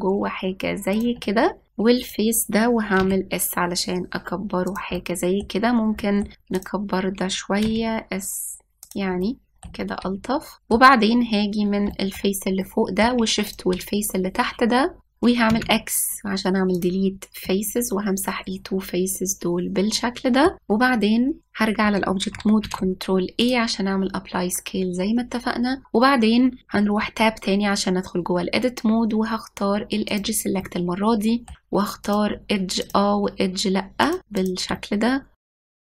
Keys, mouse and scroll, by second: 1.7 middle click, 2.7 click, 3.7 s, 5.7-7.2 middle drag, 7.2 click, 8.3 s, 9.9 middle click, 10.7-11.0 scroll down 1, 11.0-14.2 middle drag, 14.2 shift+click, 16.2 x, 18.1-21.5 middle drag, 21.5-23.3 drag, 23.3 ctrl+a, 27.7 Tab, 30.8 click, 31.3 middle click, 31.7-32.6 scroll up 1, 32.7 click, 33.5 shift+click, 34.3 shift+click, 35.0 shift+click, 35.4 middle click, 35.6 scroll down 1, 35.7 shift+click.